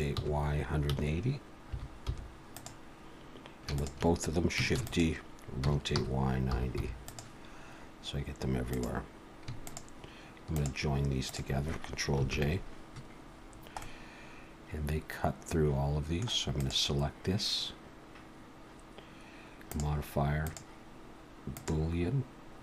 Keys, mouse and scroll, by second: 3.7 shift+click, 4.8 shift+d, 5.6 r, 8.7 click, 9.7 shift+click, 10.7 click, 11.4 click, 12.3 ctrl+j, 13.5 scroll down 2, 13.8 middle click, 16.6 click, 19.7 click, 20.5 click.